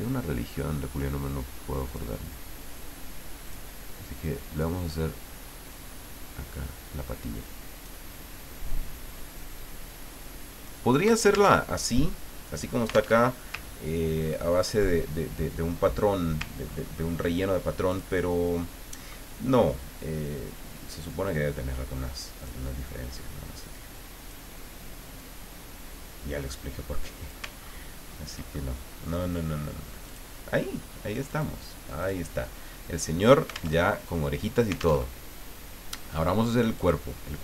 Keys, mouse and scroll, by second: 0.4-0.8 ctrl+scroll up 2, 1.9 click, 3.4 click, 4.8 click, 5.7-8.2 drag, 9.6-11.1 drag, 11.6 alt+Tab, 13.1 alt+Tab, 13.5-13.9 scroll down 3, 14.3 ctrl+middle click, 16.7-17.1 ctrl+scroll up 2, 17.9 click, 18.6 middle click, 21.1-22.8 drag, 23.7 click, 25.1-27.5 drag, 27.6-28.4 ctrl+scroll down 4, 28.7 ctrl+middle click, 30.1 click, 31.3 click, 32.0 click, 33.8 alt+Tab, 35.0 alt+Tab, 36.8 click.